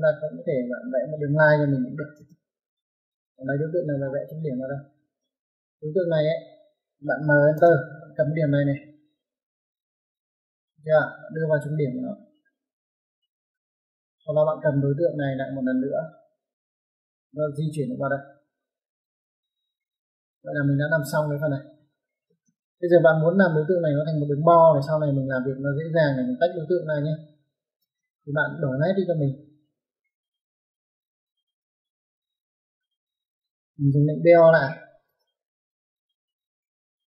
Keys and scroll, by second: 1.7 l, 2.1 space, 4.9 space, 7.3 m, 7.4 space, 16.4 typing, 22.1 typing, 27.6 typing, 34.1-35.0 typing.